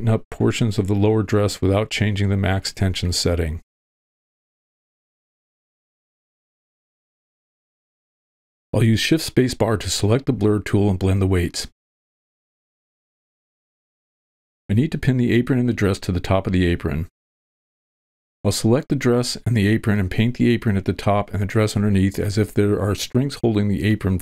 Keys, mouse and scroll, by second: 0.3 middle click, 0.7-2.8 drag, 3.1 middle click, 3.6-4.9 drag, 5.0 middle click, 5.6-7.4 drag, 7.8 click, 8.2 middle click, 9.1 shift+space, 10.3 shift+space, 11.7 click, 12.4 middle click, 12.8 click, 13.3 middle click, 13.7 click, 14.1 alt+h, 15.3 click, 19.4 b, 20.7 v, 20.7 w, 21.1-21.5 drag, 22.0 ctrl+l, 23.7 shift+h.